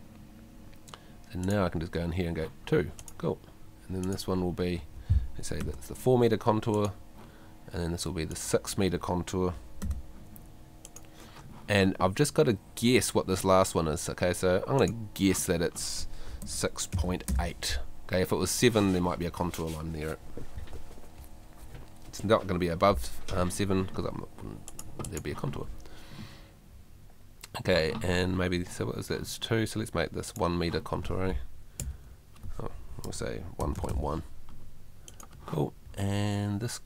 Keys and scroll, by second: 5.6 4, 9.8 6, 16.4 6, 31.8 i, 33.1 BackSpace.